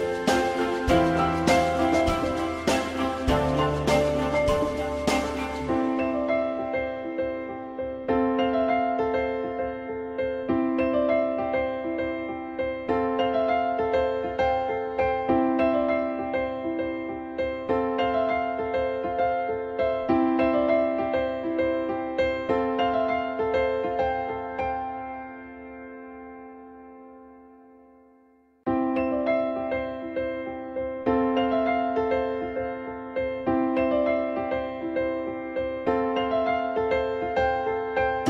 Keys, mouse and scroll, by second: 1.8 click, 3.4 click, 4.5 alt+middle click, 11.2 ctrl+z, 15.7 F3, 16.7 F3, 17.8 F3, 19.9 F3, 24.2 F3, 26.8 alt+middle click, 27.2 alt+middle click, 29.8 z, 32.5 click, 33.0 F3, 33.5 F3, 33.7 F4, 34.1 alt+middle click.